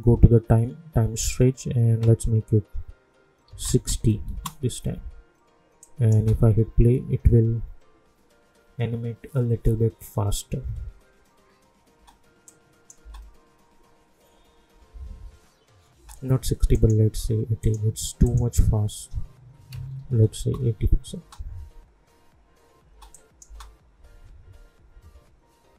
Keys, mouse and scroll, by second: 1.2 click, 4.3 Return, 5.8 click, 6.1 space, 11.9 space, 12.4 click, 13.0 space, 15.9 space, 16.7 right click, 17.6 click, 20.4 Return, 21.2 space, 23.1 click, 23.4 space.